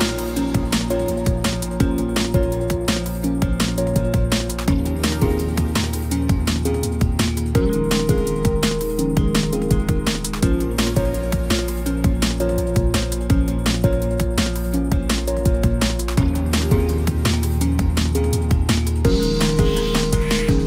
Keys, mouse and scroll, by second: 2.2 ctrl+t, 5.3 right click.